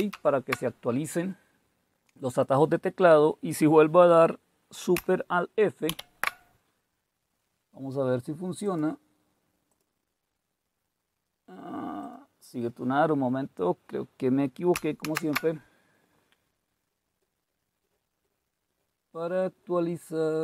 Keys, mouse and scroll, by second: 0.0 super+Escape, 6.0 alt+super+f, 8.7 click, 9.7-11.8 drag, 12.0 click, 15.1 shift+super+q.